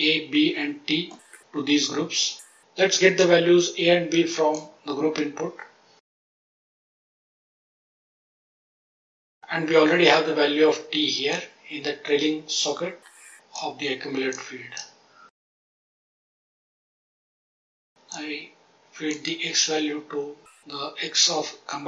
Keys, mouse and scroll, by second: 1.0 middle click, 3.1-4.5 drag, 6.2 click, 7.0-7.6 drag, 8.1 click, 11.2-13.5 drag, 14.2-14.7 drag, 15.0-15.5 scroll down 1, 15.5 click, 15.8 click, 16.1 click, 16.3 click, 16.7 click, 17.0 click, 17.3 click, 18.0 click.